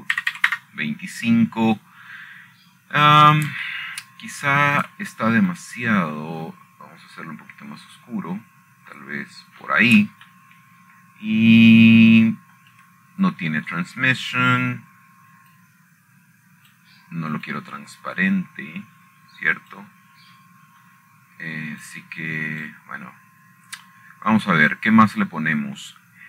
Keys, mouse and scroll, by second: 0.2-1.3 drag, 2.4 ., 2.9 KP_2, 3.1 KP_5, 3.2 Return, 5.0 scroll up 2, 5.0-6.7 scroll down 9, 6.4 shift+middle click, 7.5 shift+middle click, 8.2 click, 9.5-11.2 scroll down 3, 11.6-12.5 scroll up 2, 12.7-14.3 shift+middle drag, 15.3 shift+middle click, 18.2-19.9 drag, 20.2-22.5 drag, 22.6 click, 24.6 click.